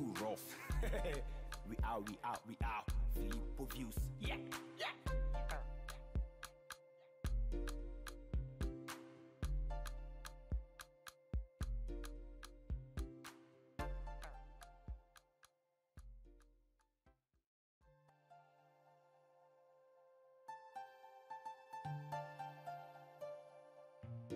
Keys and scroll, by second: 17.4 ctrl+Delete, 19.8 ctrl+shift+e.